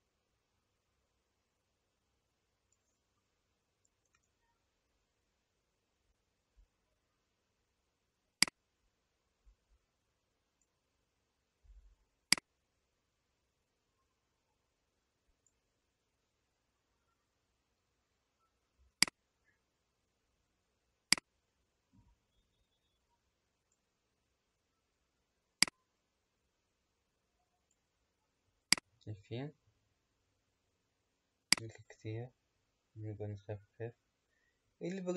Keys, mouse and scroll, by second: 4.2 KP_0, 8.3 click, 12.2 click, 19.0 click, 21.1 click, 25.6-28.9 drag, 31.4-34.6 drag.